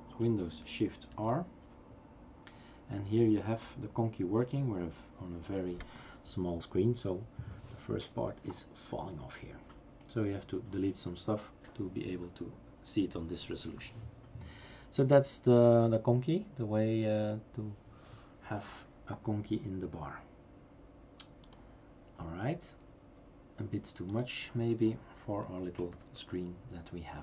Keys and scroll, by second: 1.1 shift+super+r, 26.0 #.